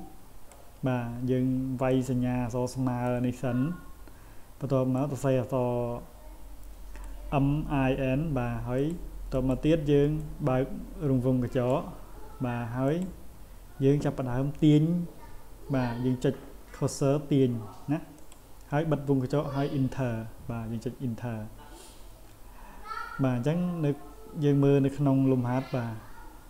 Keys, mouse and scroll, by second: 1.9-3.1 drag, 5.0-7.0 drag, 8.8 click, 9.3 click, 10.2-11.7 drag, 12.9 click, 18.2 click, 23.2 scroll down 1, 24.0 scroll down 1.